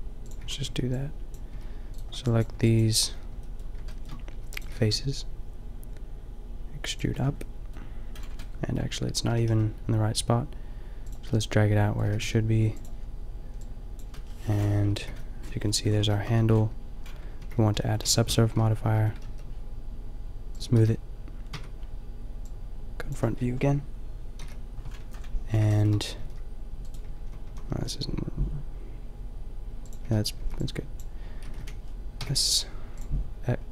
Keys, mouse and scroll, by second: 0.3-3.0 typing, 4.4 e, 4.7 g, 7.1 Tab, 9.2 g, 10.8 click, 12.1 g, 15.0 KP_5, 15.3 middle click, 15.6 middle click, 16.4 Tab, 17.3 ctrl+2, 18.0 Tab, 18.4 Tab, 19.0 Tab, 19.2 t, 20.8 t, 21.6 Tab, 24.3 KP_5, 25.7 middle click, 26.1 g, 27.0 a, 27.4 a, 27.6 g, 28.9 click, 30.0 a, 30.4 b, 31.4 s, 32.9 click.